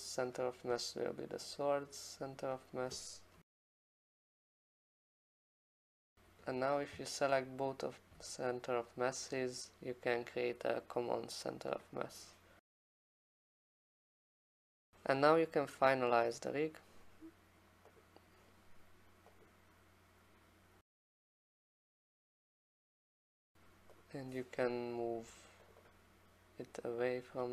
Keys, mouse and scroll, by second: 0.4 click, 1.3 click, 1.5 click, 2.6 click, 3.5-6.6 typing, 4.5 click, 4.6 click, 11.8 click, 12.6 scroll down 5, 12.8-13.2 scroll up 3, 13.2 click, 13.5 Caps_Lock, 13.6-14.5 typing, 15.8 scroll down 1, 15.9 scroll, 18.0 scroll, 18.1 click, 19.4 click, 22.7 click, 23.1 click, 24.0 click, 25.7 click, 25.9 click.